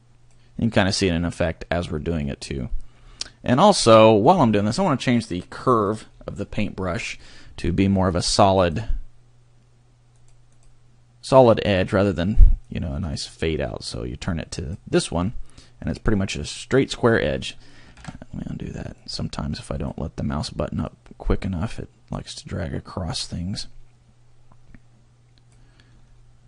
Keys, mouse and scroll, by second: 3.0-5.7 scroll down 1, 5.7 click, 6.1 scroll down 1, 8.1 click, 8.6 click, 10.1 click, 10.5 click, 12.7 click, 18.1 ctrl+z, 19.0 click, 20.9 click, 23.1 click, 25.9 scroll down 1.